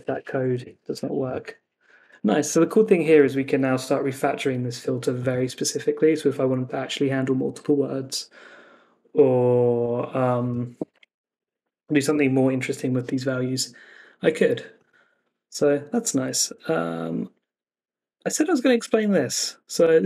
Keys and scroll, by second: 0.5 super+s.